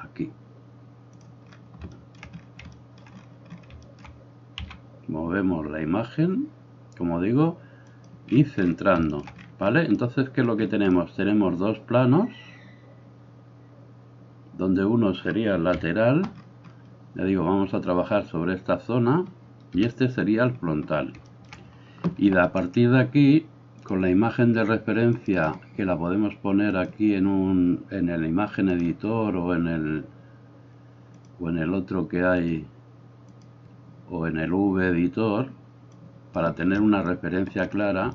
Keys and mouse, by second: 1.3-23.8 middle drag, 4.7 g, 15.8 KP_3, 19.8 KP_1, 23.8-25.5 drag, 25.5-26.8 middle drag, 26.8-38.1 drag.